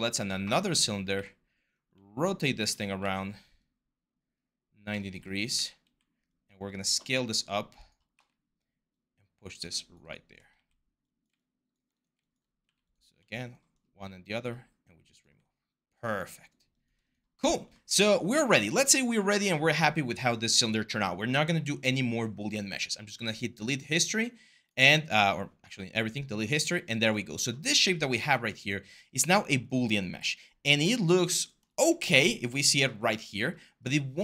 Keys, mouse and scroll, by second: 0.3-1.4 typing, 2.8 ctrl+z, 5.3 w, 5.7 r, 7.9 w, 10.3 r, 12.4 q.